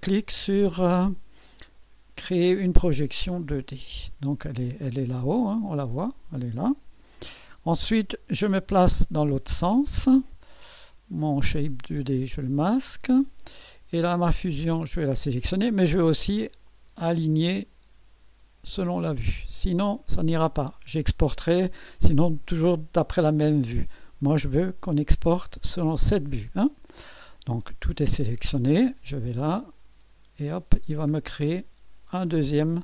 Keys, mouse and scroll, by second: 3.4 click, 5.4-6.4 drag, 7.1 1, 11.9 space, 14.8 click, 16.7 click, 19.2 click, 29.7 click, 30.5-30.9 scroll down 1, 31.3 scroll down 1.